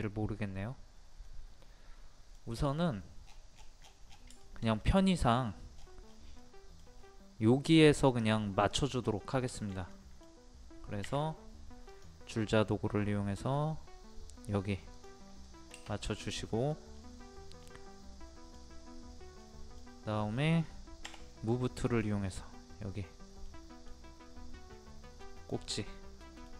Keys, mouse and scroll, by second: 3.2 scroll down 1, 3.3 scroll up 1, 3.5 scroll down 1, 4.4 shift+middle click, 4.7 scroll up 1, 4.8 middle click, 5.4-5.8 scroll up 1, 6.4 middle click, 6.9 scroll up 1, 8.1 click, 9.1 scroll down 1, 9.5-11.1 shift+middle drag, 11.1 t, 11.9 click, 15.2 scroll down 1, 15.4 middle click, 16.0 click, 16.4 middle click, 16.9-17.6 scroll up 1, 17.6-19.0 middle drag, 21.0 m, 21.9 click, 23.4 middle click, 25.3 click, 25.7 middle click.